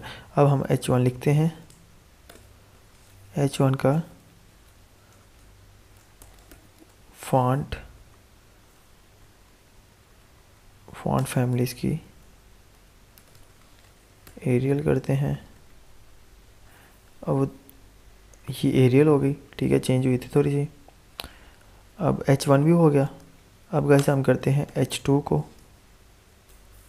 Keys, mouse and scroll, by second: 0.6-2.2 typing, 2.7 Return, 3.8-6.9 typing, 7.8 Up, 8.9 Down, 11.1 Return, 11.8 typing, 12.8-14.7 typing, 14.9 ctrl+s, 15.4 alt+Tab, 17.6 F5, 19.6 alt+Tab, 23.0 click, 23.9 Return, 24.6 shift+,, 25.6 BackSpace.